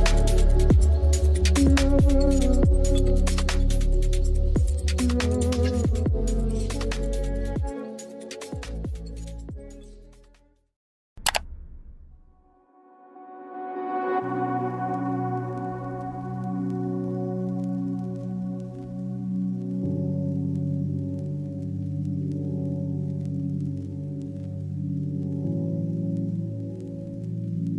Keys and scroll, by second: 4.9-5.9 typing, 7.2 Return, 9.2 ctrl+s, 14.1-16.0 typing, 16.2 Return, 16.9 ctrl+s.